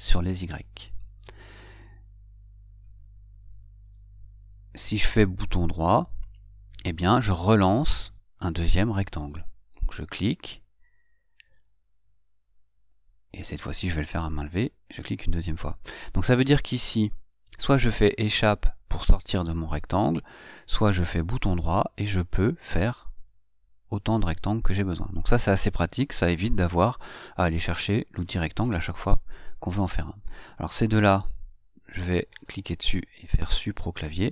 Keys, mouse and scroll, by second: 0.1 click, 14.8 click, 21.4 right click, 25.3 click, 31.2 click.